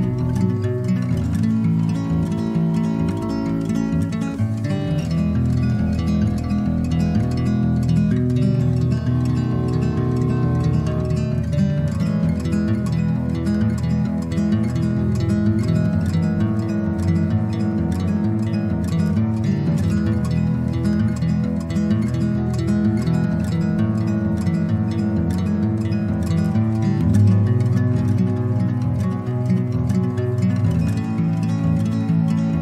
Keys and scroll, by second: 18.6 ], 18.7 ], 18.9 ], 19.2 ], 22.5 [, 22.7 [, 31.8 x.